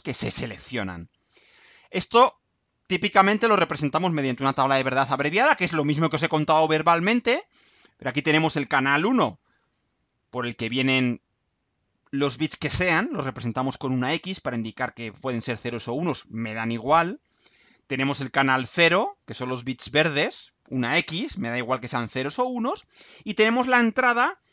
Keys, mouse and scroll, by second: 0.6-1.0 scroll down 2, 1.2-2.3 scroll down 4.